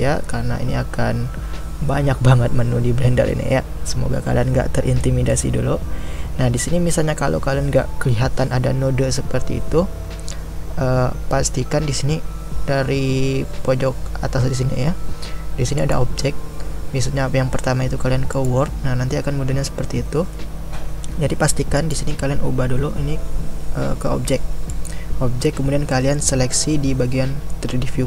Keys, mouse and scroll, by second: 25.9-26.4 middle drag, 26.4 scroll up 2, 27.5-28.0 middle drag.